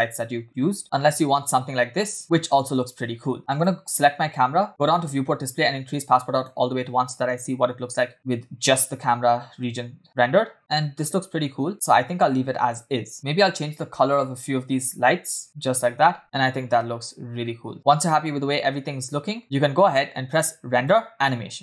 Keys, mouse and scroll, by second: 1.6 space, 3.4 space, 3.5 click, 4.8 click, 5.1-5.9 scroll down 1, 5.9 click, 7.0 space, 14.2 click, 14.9 click, 16.1 space, 19.4 space, 20.3 click, 20.7-21.6 drag.